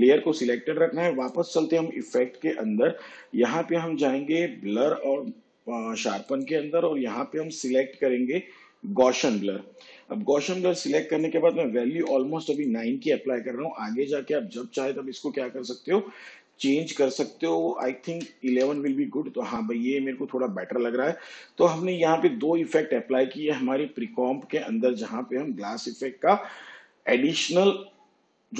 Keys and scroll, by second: 12.0 9, 18.1 1.